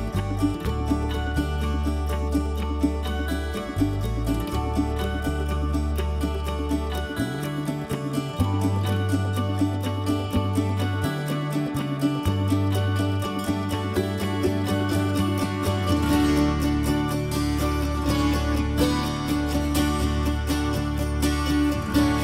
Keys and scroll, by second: 1.7-6.0 typing, 7.2-9.7 typing, 8.6 Escape.